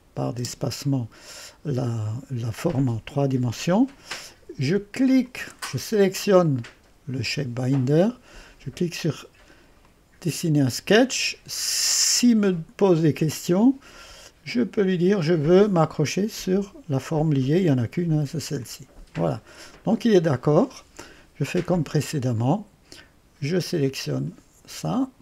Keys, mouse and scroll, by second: 0.1 click, 0.4 typing, 5.3 click, 6.5 click, 9.8 click, 15.3 click, 16.1 click, 18.6 click, 22.1 click, 24.0 click.